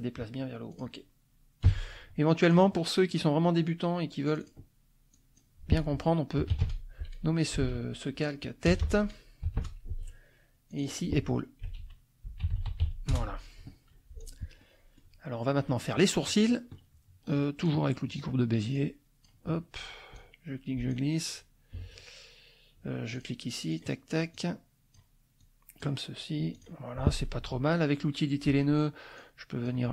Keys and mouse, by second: 0.7 click, 1.6 Page_Up, 2.4 click, 3.1 click, 4.3 click, 5.1 click, 6.2-9.5 typing, 9.6 Return, 10.7 click, 11.6-13.3 typing, 14.2 click, 14.6 middle click, 14.8 click, 15.5 click, 15.9 click, 17.6 click, 18.7 click, 20.1 click, 23.1 click, 23.7 click, 24.3 click, 25.4 click, 26.5 click, 27.4 F2, 29.2 click.